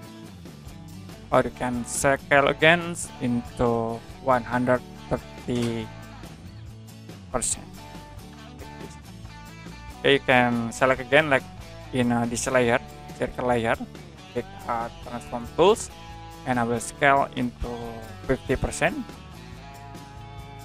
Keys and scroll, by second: 4.2 1, 4.9 3, 6.3 BackSpace, 7.6-8.8 typing, 18.4 5, 18.7 0.